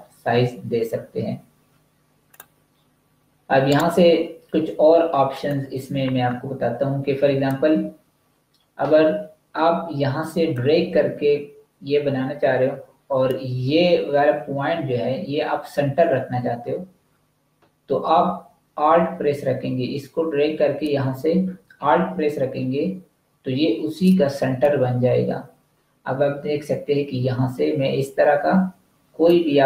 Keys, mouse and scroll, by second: 2.1 click, 3.5 right click, 5.1 click, 10.4 click.